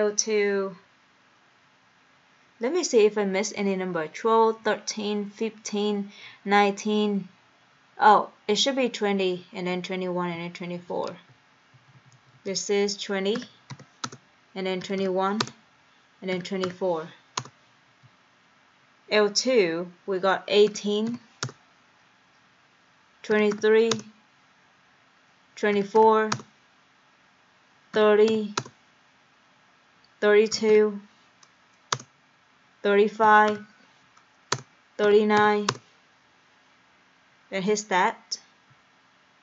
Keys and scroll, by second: 11.2 Left, 11.8 Down, 12.0 Down, 12.2 Down, 12.4 Down, 13.4-16.7 typing, 14.1 Return, 17.4 Return, 18.0 Right, 20.7 1, 21.5 Return, 21.5 8, 23.1-24.1 typing, 24.6 Return, 25.6-26.5 typing, 28.0 3, 28.3 0, 28.6 Return, 30.3-31.2 typing, 32.0 Return, 33.9-35.4 typing, 35.7 Return.